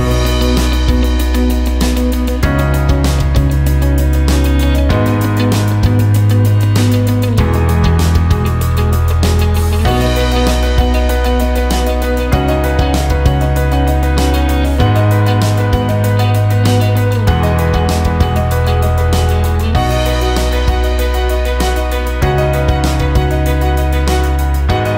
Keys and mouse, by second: 1.7 click, 2.8 KP_7, 4.9 ctrl+KP_2, 7.3 ctrl+KP_1, 9.1 click, 10.5 KP_7, 12.3 ctrl+KP_1, 14.5 click, 15.5 KP_7, 17.2 g, 22.6 ctrl+KP_1, 23.9 click.